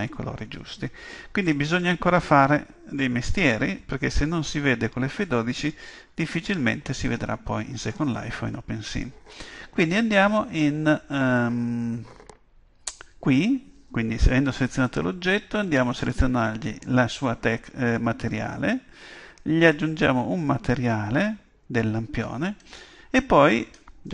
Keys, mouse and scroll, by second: 16.0-17.9 drag, 19.6-21.5 drag.